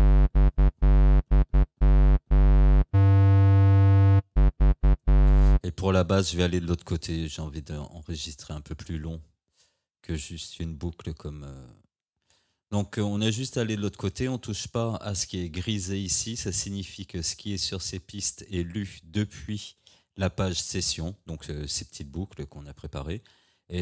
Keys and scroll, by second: 20.3 Tab, 22.8 Tab.